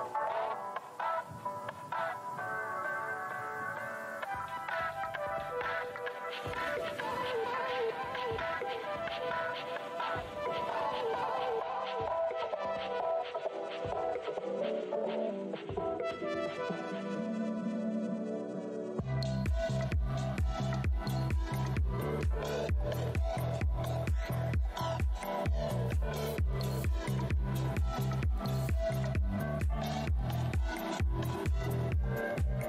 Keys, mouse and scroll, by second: 1.5-2.1 scroll down 1, 5.0 scroll up 1, 5.1-5.6 scroll down 1, 5.6-7.5 scroll up 1, 9.4 scroll up 1, 10.6 click, 10.8 click, 11.0-11.7 typing, 11.6 scroll down 1, 12.2 alt+click, 12.8 shift+right click, 13.5 alt+click, 14.1 alt+shift+w, 15.4-16.8 typing, 17.1 scroll down 1, 18.3 scroll down 1, 18.3 w, 21.1 scroll down 1, 22.5 click, 22.7 w, 23.0 click, 23.0 shift+v, 24.4 click, 24.9 alt+scroll down 1, 25.2 shift+scroll up 2, 25.3 shift+v, 26.9 scroll down 2, 28.2 click, 28.8 shift+right click, 30.6 click, 31.0 r, 31.6 click.